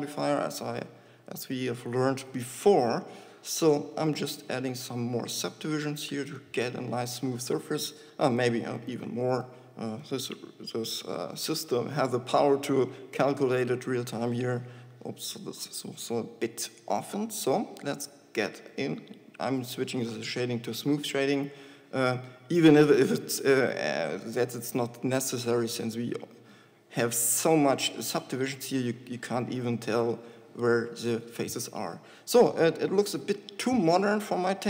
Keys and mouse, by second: 28.4 z, 30.4 z.